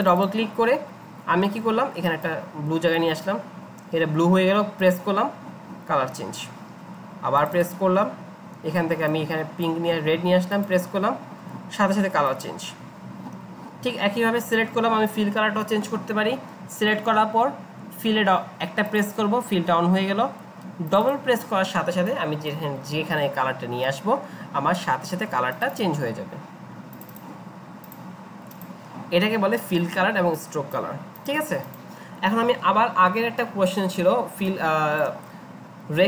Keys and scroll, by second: 34.4-35.1 Up.